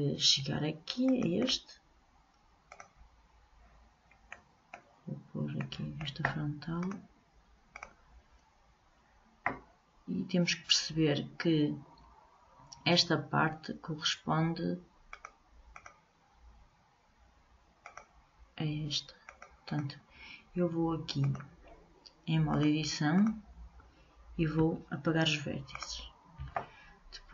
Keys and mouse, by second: 1.2-3.5 drag, 4.5 middle click, 6.7 click, 7.9 click, 15.2-17.7 drag, 18.0-24.5 drag, 24.8 Delete.